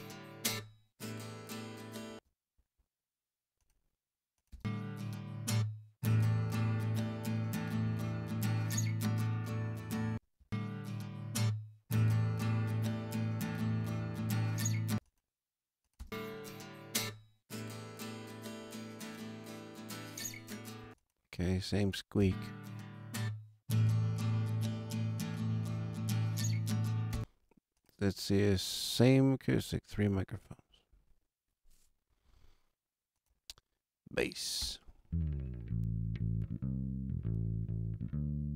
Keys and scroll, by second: 2.0 space, 4.4 space, 10.0 space, 14.8 space, 15.9 space, 20.8 space, 27.1 space, 34.5 space.